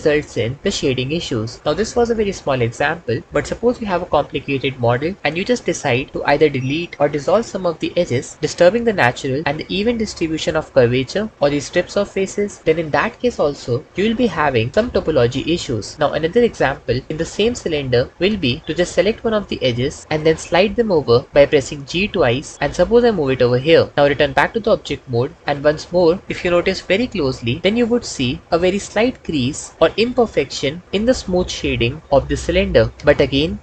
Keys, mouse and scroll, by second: 11.3 3, 19.3 2, 21.7 g, 21.9 g, 24.2 Tab, 32.9-33.6 drag.